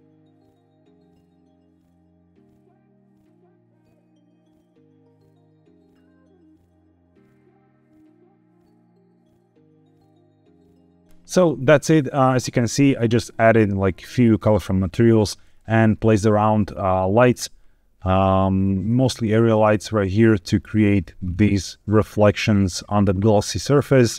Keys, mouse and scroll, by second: 0.7 g, 1.8 z, 3.0 click, 3.5 scroll up 2, 3.6-4.0 middle drag, 4.1 drag, 4.5 shift+click, 4.7 shift+click, 4.9 click, 5.0 click, 5.2 click, 5.5 shift+click, 5.7 middle click, 5.9 KP_1, 6.1 g, 6.5 z, 6.8 middle click, 7.0 click, 7.4 middle click, 7.7 KP_0, 7.9 scroll down 1, 8.3 click, 8.4 g, 9.3 click, 9.4 scroll up 3, 9.6 shift+middle click, 10.4 scroll up 1, 15.5-16.2 scroll down 1, 16.2-17.2 scroll down 1, 17.2 click, 17.2 scroll down 1, 18.0 click, 19.1 click, 21.2 scroll up 2, 23.8-24.1 scroll down 2.